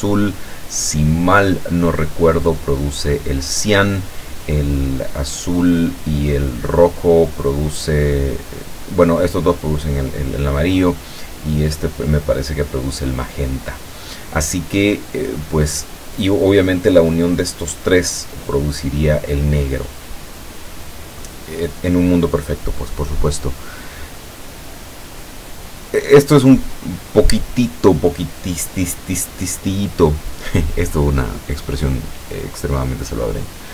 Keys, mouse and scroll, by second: 26.4-27.5 drag.